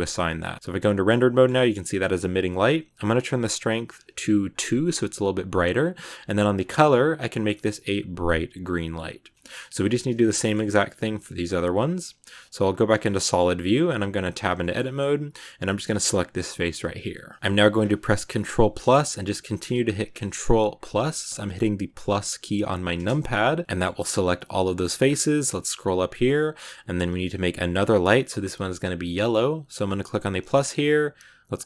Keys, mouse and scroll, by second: 0.1 Tab, 0.4 z, 1.0-3.1 middle drag, 3.1-4.5 drag, 5.7-6.4 scroll up 1, 6.4 click, 9.2-11.5 middle drag, 11.5 z, 12.9 scroll up 2, 13.1 middle click, 13.3 right click, 14.0 Tab, 14.5-15.8 shift+middle drag, 15.8 right click, 16.4-18.7 middle drag, 18.7 ctrl+KP_Add, 19.5 ctrl+KP_Add, 22.9 ctrl+KP_Add, 23.6-24.9 middle drag, 24.9 scroll up 5, 30.1-31.6 drag.